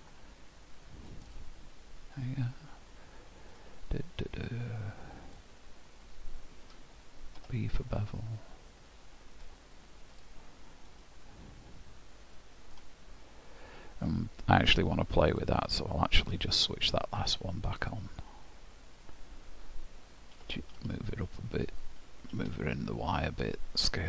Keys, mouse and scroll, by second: 3.5 click, 10.9 middle click, 14.0-15.3 scroll down 12, 15.3 click, 16.0 click, 17.1 click, 17.8 click, 18.8 scroll up 1, 20.4 g, 22.4 g.